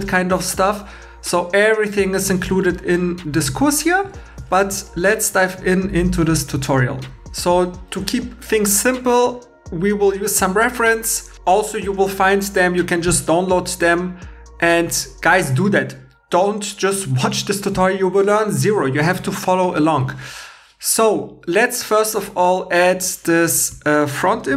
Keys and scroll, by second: 3.5 super+Tab, 7.2 shift+e.